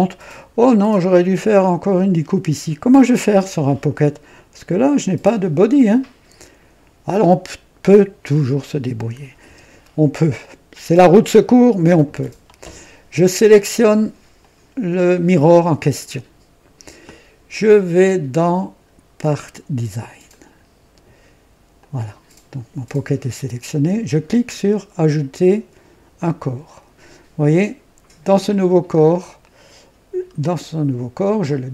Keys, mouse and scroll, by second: 3.1 click, 9.4 KP_2, 10.3-11.1 right drag, 14.3 click, 18.3 click, 20.2 click, 21.7 click, 26.1 click, 28.4 click, 28.9 scroll down 1, 31.4 click.